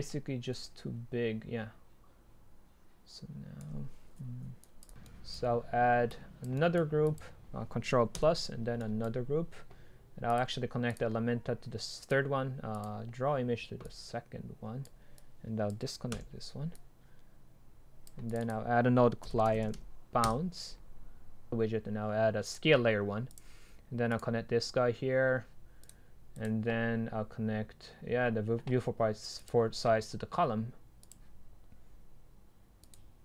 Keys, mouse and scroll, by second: 4.8 right click, 6.1-6.6 drag, 7.1 click, 10.4-13.3 drag, 13.3-13.9 scroll down 2, 13.9-14.7 drag, 16.2 Delete, 20.2 Return.